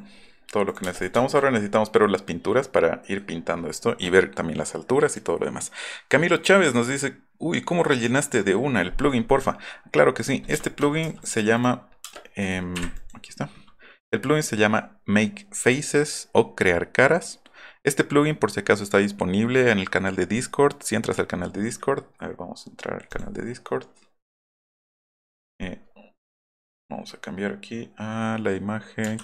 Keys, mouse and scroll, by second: 0.7 middle click, 0.8 space, 0.9 middle click, 1.2 shift+middle click, 3.0 middle click, 10.6 shift+middle click, 11.2 middle click, 11.6 middle click, 11.8 middle click, 12.0 space, 23.1 click, 29.0 ctrl+shift+4.